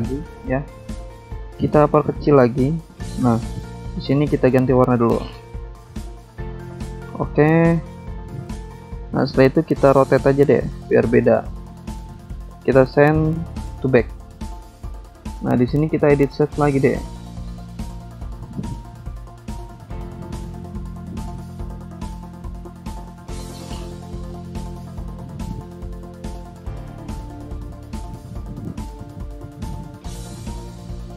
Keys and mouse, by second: 2.2 click, 3.7 ctrl+c, 4.6 ctrl+v, 4.6 click, 8.1 click, 9.2 click, 10.1 click, 12.2 ctrl+click, 14.6 click, 15.5 click, 17.4 click, 18.0 click, 18.1 double click, 20.8 click, 21.6 click, 22.8 click, 24.1 click, 25.6 ctrl+z, 26.2 click, 27.1 click, 28.5 click, 29.8 click.